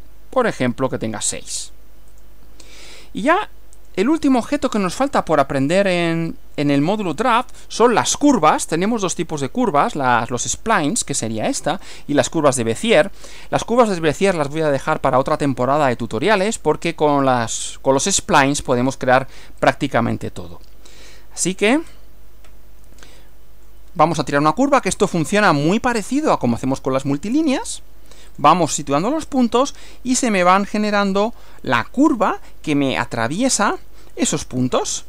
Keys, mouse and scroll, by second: 0.6 scroll up 1, 1.6 click, 2.2 click, 3.8 click, 6.8 click, 19.6 click, 21.6-22.1 scroll up 2, 23.0 shift+middle click, 28.4 click, 29.3 click, 31.2 click, 33.8 click, 34.6 click.